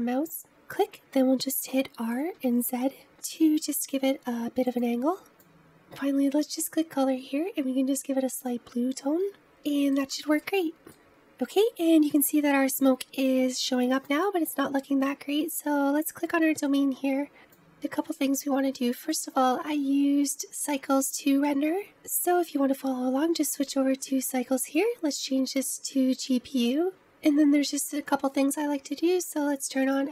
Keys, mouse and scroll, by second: 1.6 middle click, 2.3 r, 5.3-8.3 middle drag, 8.3 click, 11.2 middle click, 14.0 click, 22.2 click, 25.6-27.0 drag.